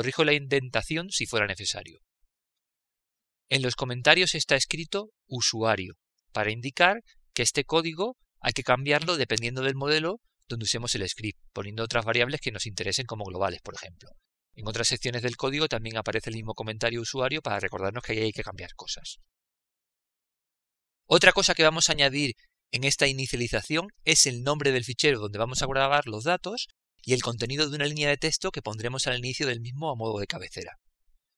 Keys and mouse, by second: 3.0 Return, 3.0 click, 5.1 click, 6.9 click, 9.3 shift+Tab, 10.6 Tab, 11.6 click, 13.5 click, 13.6 Return, 28.2 click.